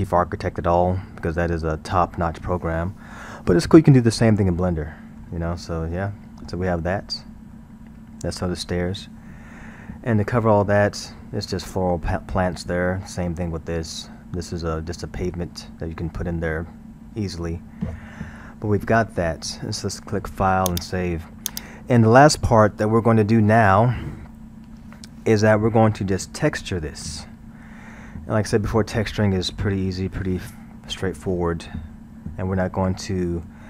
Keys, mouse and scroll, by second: 4.4-7.1 middle drag, 7.1 scroll, 7.6-10.6 middle drag, 18.7-20.7 middle drag, 20.7-23.7 drag, 24.3-26.2 middle drag, 26.2-26.8 scroll, 26.8-29.6 middle drag, 29.6-32.6 scroll, 32.8-33.6 shift+middle drag.